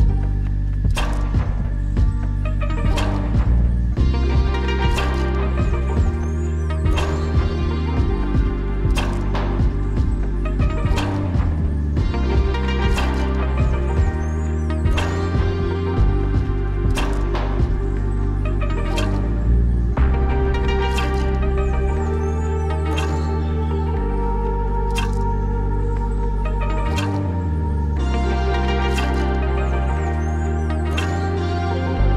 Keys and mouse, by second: 3.3 middle click, 4.2 Tab, 5.5 shift+middle drag, 6.4 click, 7.5 middle click, 8.7 shift+middle drag, 9.0-10.1 drag, 10.9 middle click, 11.6 shift+middle click, 12.4 shift+middle click, 12.9 shift+middle click, 13.2 shift+middle click, 13.9 shift+middle click, 14.8 ctrl+click, 15.7 middle click, 17.2-18.8 middle drag, 20.3-21.3 middle drag, 21.7 click, 22.4 shift+click, 22.9-23.4 drag, 23.8-24.4 shift+drag, 27.8 ctrl+r.